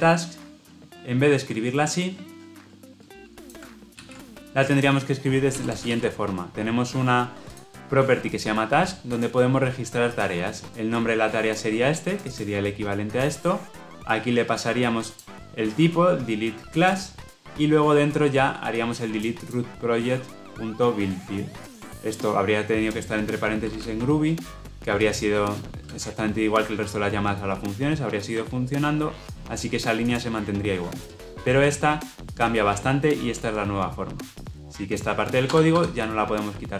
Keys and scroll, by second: 5.8 ctrl+v.